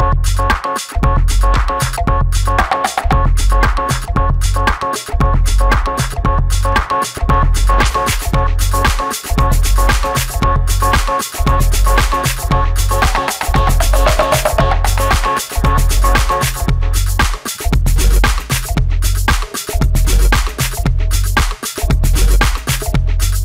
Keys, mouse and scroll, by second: 0.8 Escape, 4.7 shift+middle click, 5.4 space, 9.5 shift+middle click, 13.0 shift+a, 14.8 shift+t, 16.7 alt+t, 22.9 space.